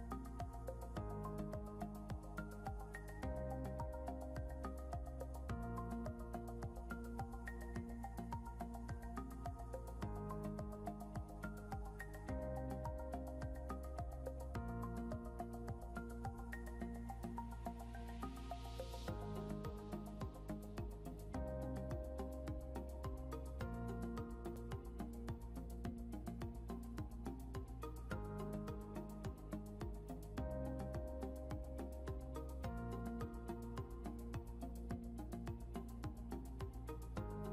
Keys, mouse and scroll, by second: 0.6 scroll up 1, 4.2 scroll up 1, 8.4 scroll down 1, 11.4 scroll up 1, 21.5 scroll down 1.